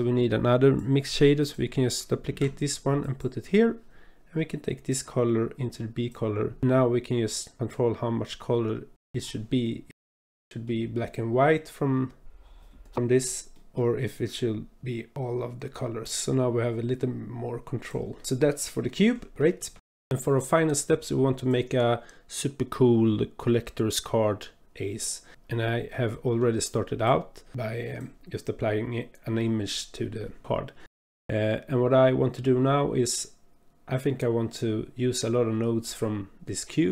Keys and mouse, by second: 0.0 click, 2.3 shift+d, 5.2-6.1 drag, 7.8-9.2 drag, 9.8-10.7 drag, 12.8 click, 13.5 middle click, 15.4-18.2 drag, 18.8-19.9 drag, 20.1 shift+click, 21.8 click, 22.4 Delete, 24.7 click, 25.9 click, 27.0 click, 28.0 click.